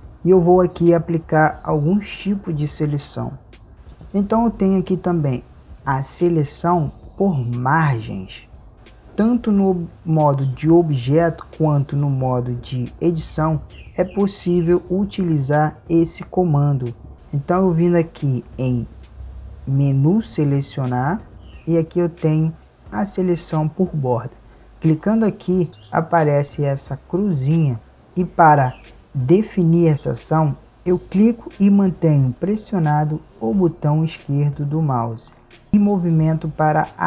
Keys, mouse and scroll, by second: 21.0 click.